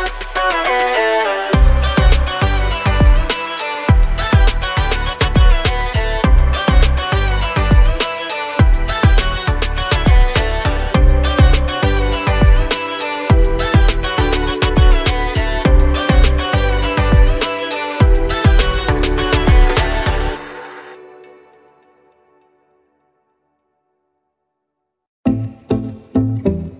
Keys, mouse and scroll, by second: 2.6 ctrl+z, 4.1 click, 7.9 click, 8.5 scroll down 1, 11.0 click, 11.7 scroll up 1, 12.9 click, 17.1 ctrl+z, 18.3 click, 18.6 scroll down 1, 20.1 click, 25.0 ctrl+z, 26.0 click.